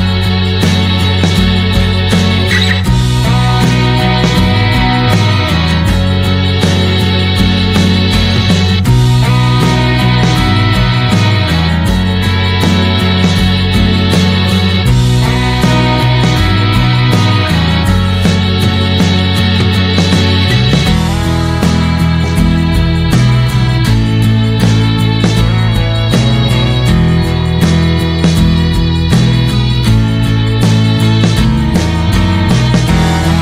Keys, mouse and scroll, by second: 0.0 shift+middle click, 0.4-2.9 drag, 7.2 middle click, 7.3-8.6 scroll up 3, 7.6 shift+middle click, 8.6 click, 10.9 click, 11.7 click, 13.9 click, 14.4 scroll down 3, 17.9 n, 20.8-28.0 drag, 29.8 shift+d, 31.1 click, 31.9 Delete, 31.9 click.